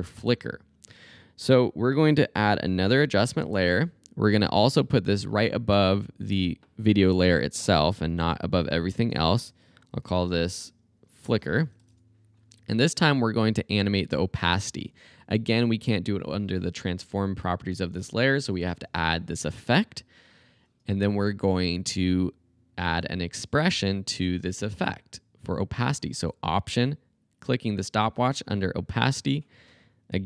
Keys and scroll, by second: 2.9 alt+super+y, 5.7 Return, 9.6-12.3 typing, 30.0-30.2 typing.